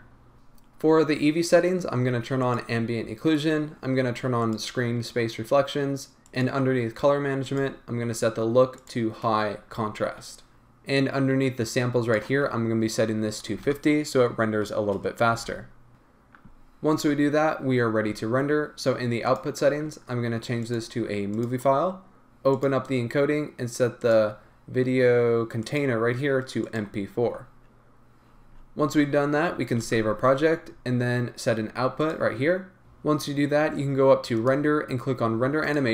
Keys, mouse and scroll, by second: 0.3 Return, 0.3-2.6 drag, 4.4 click, 9.0-32.1 drag, 10.5 Return, 15.5 Return, 32.8 space.